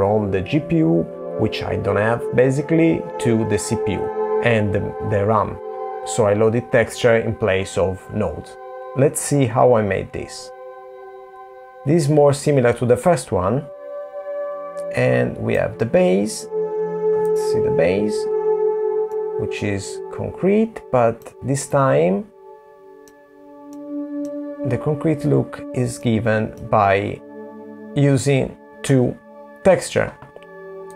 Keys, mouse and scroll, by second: 3.6 super+z, 5.7 scroll up 2, 5.8 middle click, 7.3 middle click, 11.0 middle click, 13.1 middle click, 14.0-14.7 scroll up 9, 15.3 middle click, 16.2 scroll down 2, 21.9 click, 27.0 middle click, 27.5 click.